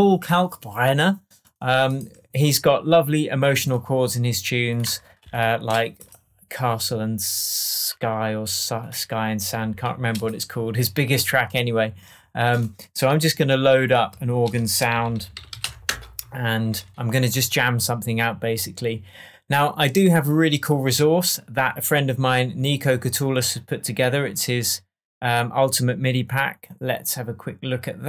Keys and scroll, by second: 13.2 shift+super+t, 14.4 super+r, 14.8-16.1 typing.